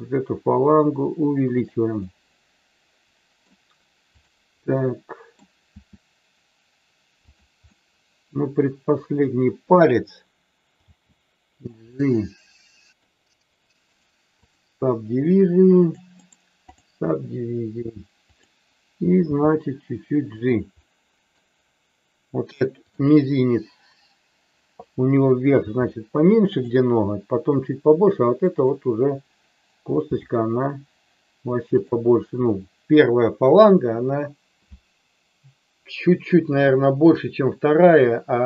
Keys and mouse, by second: 1.6 click, 2.0-3.4 middle drag, 4.5 middle click, 5.7 e, 7.2 click, 7.6-8.8 middle drag, 10.8 g, 11.5 click, 12.0-13.0 middle drag, 13.5 click, 15.9 click, 18.4 click, 19.2 g, 20.7 middle click, 22.9 click, 25.6 g, 30.1 g.